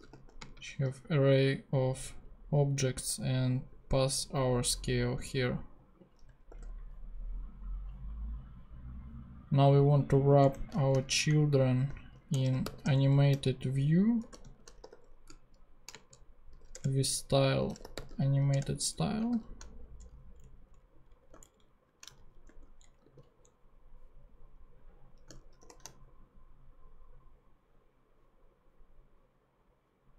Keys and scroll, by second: 0.0-0.7 typing, 2.2 Right, 6.6 ;, 10.4 Return, 10.9-19.3 typing, 16.8 Return, 18.6 Return, 18.9 Right, 19.9 shift+Return, 20.4 Down, 21.2 Up, 22.0 alt+shift+super+Up, 22.1 alt+shift+super+Left, 22.4 super+Tab, 22.8 Down, 23.0 super+x, 25.6 shift+super+p.